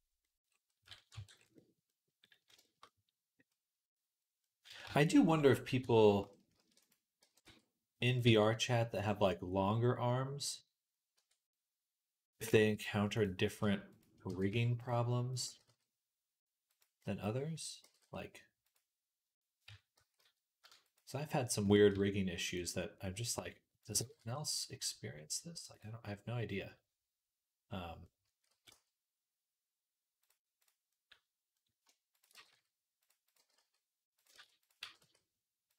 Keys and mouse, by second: 0.0 click, 0.8 click, 1.0 Tab, 1.0-2.2 middle drag, 2.4-4.1 shift+middle drag, 4.7 Tab, 5.6 Tab, 6.4 shift+d, 7.0-11.0 middle drag, 7.0 g, 8.1 s, 11.0 Tab, 13.0 click, 13.8 shift+click, 14.1 g, 15.1 click, 15.3 g, 16.8-33.1 middle drag, 17.7 g, 19.5 Tab, 19.8 s, 21.8 Tab, 23.8 g, 28.1 a, 28.4 g, 30.4 click, 32.0 shift+click, 32.2 g, 33.1 click, 34.2 ctrl+z, 34.6 g, 35.5 click.